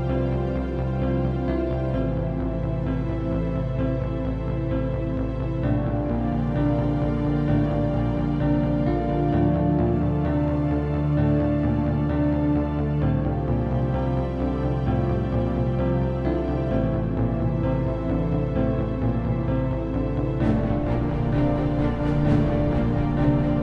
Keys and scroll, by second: 0.0-0.8 typing, 1.2 Return, 22.3-23.6 typing.